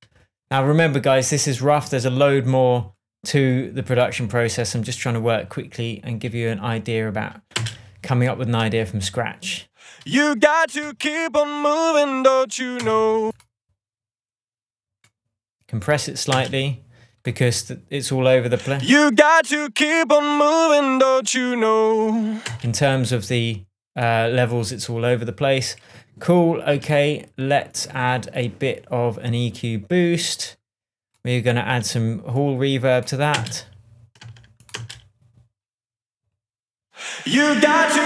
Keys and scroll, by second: 7.9 space, 13.2 space, 16.7 space, 22.8 space, 33.7 space.